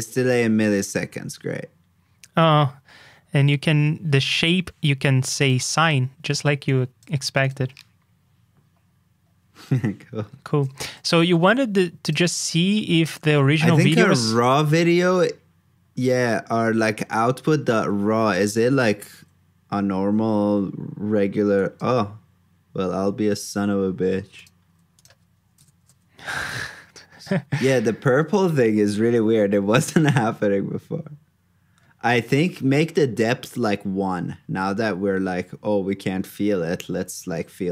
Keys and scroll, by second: 10.8 super+j, 17.2 super+c, 17.5 super+j, 25.7 super+j.